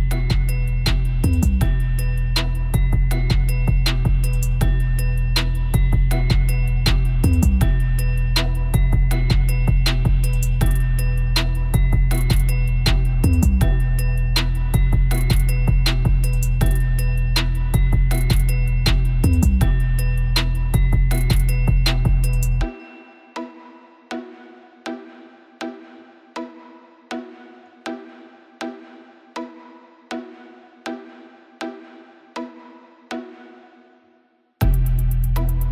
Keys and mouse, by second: 2.2 b, 2.3 b, 3.0 b, 3.7 b, 5.7 b, 7.3 b, 8.4 Delete, 12.3-13.3 middle drag, 14.5 click, 25.3 a, 25.8 c, 28.3 click, 28.5 click, 28.7-29.1 drag, 29.1-30.9 middle drag, 29.6 c, 31.8 middle click.